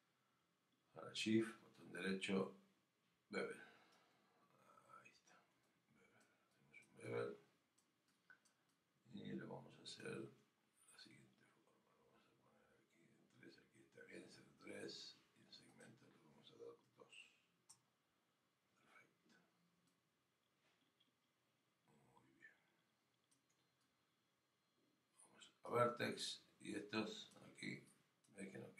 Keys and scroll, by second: 17.7 Return.